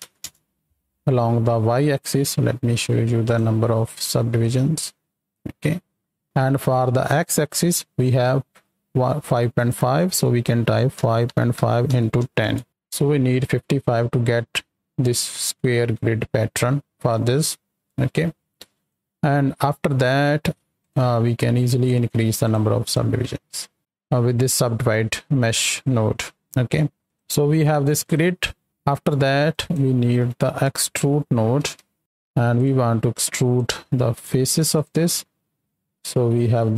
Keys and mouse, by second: 3.2-4.9 drag, 9.5-12.6 drag, 17.9 middle click, 18.9-20.0 drag, 20.8 ctrl+shift+click, 22.4 click, 22.8 click, 23.8 middle click, 25.1 middle click, 27.0 ctrl+shift+x, 27.9 click, 28.3 click, 28.6 x, 29.4 click, 33.2 click, 34.1-34.4 drag, 34.7 ctrl+shift+click, 35.2-35.9 drag, 36.1 z, 36.6 click.